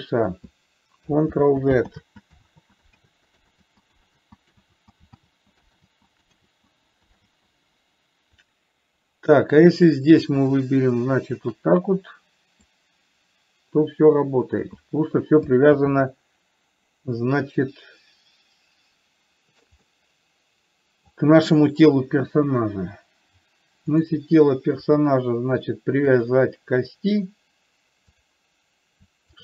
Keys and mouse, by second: 1.7 ctrl+z, 4.0 ctrl+z, 5.1 ctrl+z, 5.7 ctrl+z, 6.2 ctrl+z, 6.8 ctrl+z, 10.8 click, 11.7 shift+click, 13.0-15.1 drag, 16.1 ctrl+z, 20.2-21.5 middle drag, 24.3 click, 26.5 click.